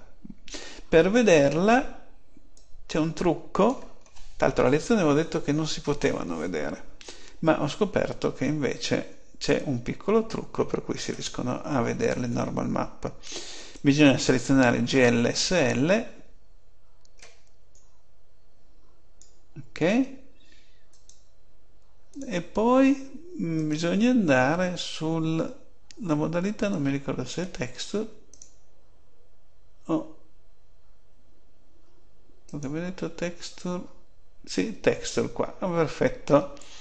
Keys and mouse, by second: 20.8-23.4 drag, 24.5 click, 28.2 click, 33.4-35.2 middle drag.